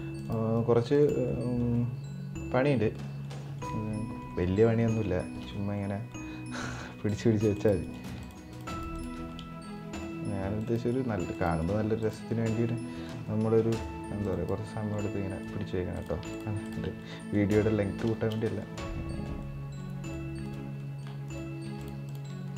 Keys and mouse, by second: 0.2 right click, 1.0 middle drag, 1.4-2.3 middle drag, 2.6 middle drag, 3.0 middle drag, 3.4-3.9 middle drag, 4.1 middle drag, 4.5 middle click, 4.9 shift+middle drag, 5.2-5.5 middle drag, 5.7-6.3 middle drag, 6.7-7.3 right drag, 7.5 right click, 8.2 ctrl+drag, 9.0-9.3 middle drag, 9.7 right click, 10.5 right click, 11.3 right click, 12.0 middle click, 13.0 middle click, 13.5 right click, 14.3 middle click, 15.1 right click, 16.0 ctrl+click, 16.7 middle click, 17.0 middle click, 17.8 shift+middle click, 18.4-19.0 middle drag, 19.1-19.5 middle drag, 19.7 right drag, 20.2-20.5 right drag, 20.5 middle click, 21.0 right click, 21.7 ctrl+click, 22.2 middle click.